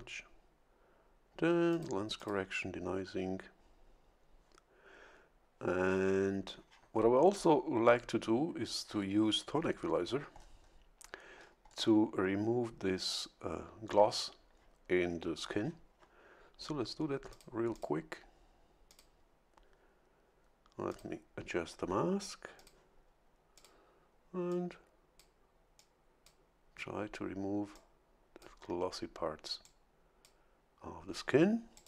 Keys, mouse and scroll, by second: 1.7 click, 2.2 click, 10.3-10.8 scroll up 1, 11.3 scroll down 1, 17.3 click, 17.7 click, 18.9 click, 20.9 click, 22.6 click, 23.5 click, 24.5 click, 25.8 click, 27.7 click, 29.6 click, 31.7 click.